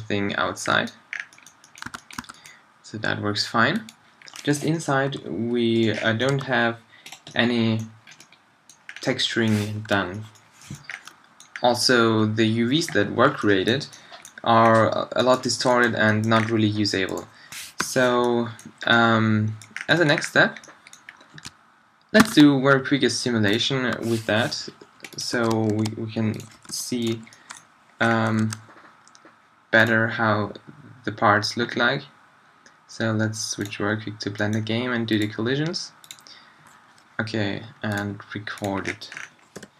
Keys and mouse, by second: 1.8 a, 2.2 a, 4.7 middle click, 5.1 g, 6.3 g, 9.9 super+z, 14.6-16.2 middle drag, 17.1-18.9 middle drag, 17.8 h, 22.2 shift+a, 24.0 s, 25.3 s, 25.9-26.6 drag, 26.6 g, 26.7-27.5 drag, 30.0-38.8 drag, 38.8 middle click, 39.6 p.